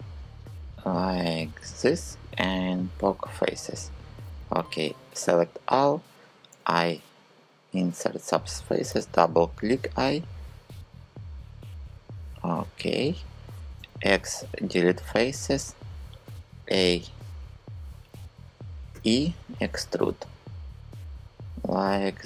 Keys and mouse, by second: 4.3 a, 6.1 i, 8.5 i, 12.0 click, 13.4 x, 15.9 a, 18.6 e.